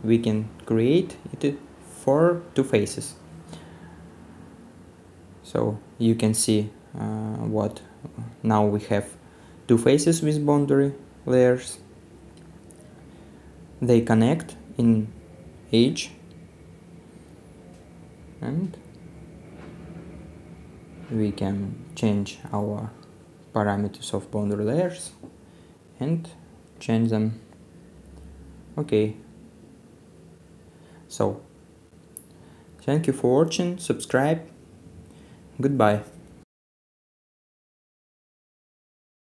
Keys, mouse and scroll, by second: 4.5 middle click, 6.1 scroll down 1, 6.2 middle click, 6.6-7.1 scroll down 1, 7.1 right click, 8.2-9.2 scroll down 1, 10.1 middle click, 10.9 scroll down 1, 11.1 middle click, 11.5 right click, 12.1-12.9 scroll down 1, 13.0 middle click, 14.2-14.6 scroll down 1, 14.6 middle click, 27.2 right click, 32.4 middle click.